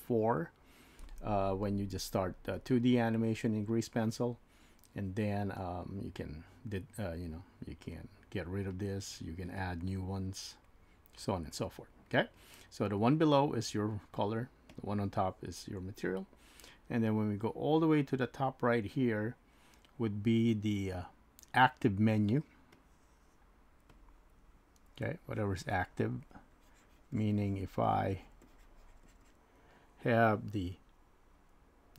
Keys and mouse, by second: 8.8 click, 9.4-11.2 typing, 9.6 click, 10.5 click, 25.2 click, 25.6 right click, 25.8-28.8 drag, 29.0-31.5 drag.